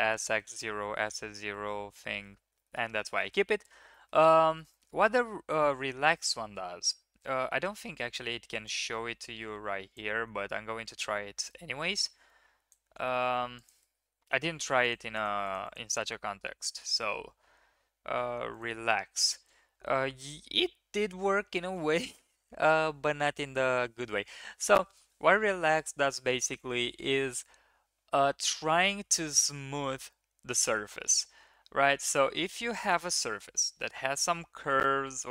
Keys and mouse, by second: 0.5 Tab, 1.3 drag, 2.5 shift+middle click, 3.0 shift+middle click, 3.5 Tab, 3.9 click, 4.5 shift+click, 4.7 click, 5.1 click, 6.8 1, 8.6-10.0 drag, 11.3 click, 11.9-12.7 drag, 14.5 3, 15.0 shift+middle click, 15.1 click, 15.4 click, 16.3 1, 16.9-18.6 drag.